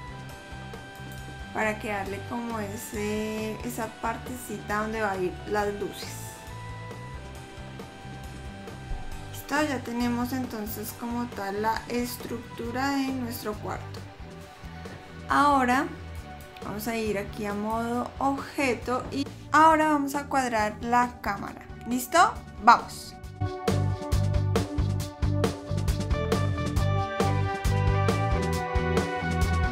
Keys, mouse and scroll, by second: 2.8-3.6 scroll up 2, 3.6 middle click, 7.3 scroll up 1, 8.0-8.7 scroll up 3, 8.8 middle click, 8.8-9.3 scroll down 3, 9.3-9.6 scroll down 2, 10.8 middle click, 10.8-11.4 scroll down 4, 16.3 click, 20.2 click, 22.0 click, 23.2 middle click, 23.5 middle click, 24.0 click, 24.4 click, 24.7 click, 24.7 scroll up 2, 25.4 KP_0, 25.7 scroll up 4, 25.8 middle click, 26.4 scroll down 2, 26.5 scroll up 4, 26.7-27.0 scroll down 5, 27.0 click, 27.5 KP_0, 27.8 r, 29.1 g, 29.5 click.